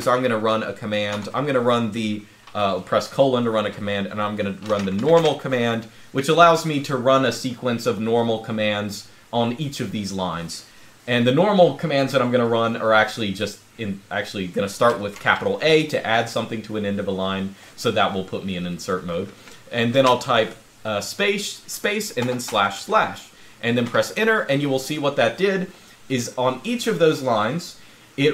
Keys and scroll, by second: 0.9 typing, 4.1-5.2 typing, 14.9 shift+a, 19.7 space, 22.0 \, 22.2 \, 23.6 Return.